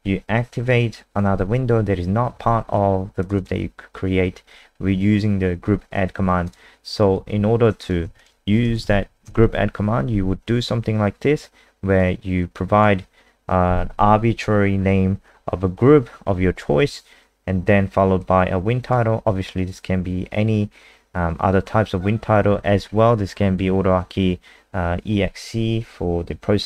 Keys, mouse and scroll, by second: 3.3 click, 6.4 click, 8.0 ctrl+c, 8.2 click, 8.6 Return, 8.8 Return, 9.0 ctrl+v, 9.2 ctrl+s, 11.9 click.